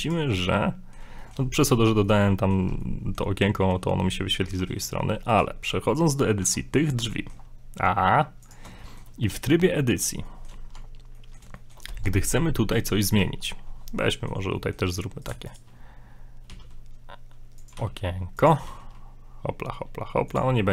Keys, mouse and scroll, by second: 0.5 middle click, 1.2 shift+middle click, 2.1 middle click, 2.8 middle click, 3.6 middle click, 4.5 middle click, 5.3 right click, 6.4 Tab, 7.1 shift+middle click, 7.4 scroll up 3, 8.4 click, 8.8 shift+middle click, 9.3 a, 9.8 middle click, 10.2 middle click, 10.3 shift+middle click, 10.7 shift+middle click, 10.8 Tab, 11.1 Tab, 11.1 middle click, 11.2 middle click, 11.5 middle click, 11.6 shift+middle click, 11.9 shift+middle click, 11.9 Tab, 12.7 right click, 13.9 scroll down 2, 14.0 middle click, 14.5 middle click, 15.3 right click, 15.5 shift+right click, 16.5 e, 17.8 g, 18.7 s, 20.6 middle click.